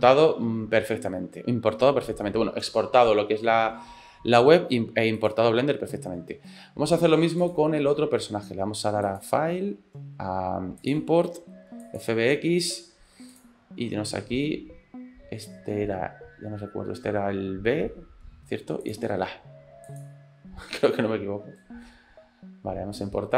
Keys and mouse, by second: 5.4 click, 7.4 click, 9.2-12.1 drag.